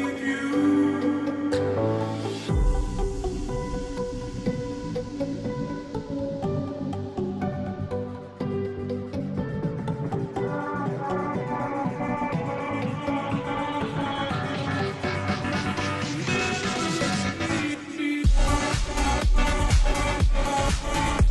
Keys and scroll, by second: 11.1-11.8 space, 21.1 space.